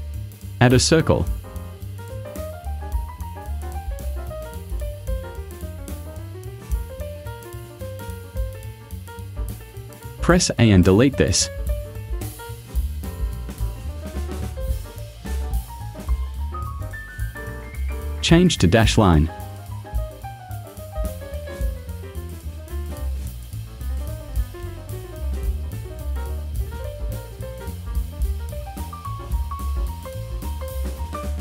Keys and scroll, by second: 8.1 /, 10.0 a, 12.4 Delete, 15.3 Delete, 24.3 0, 24.6 ,.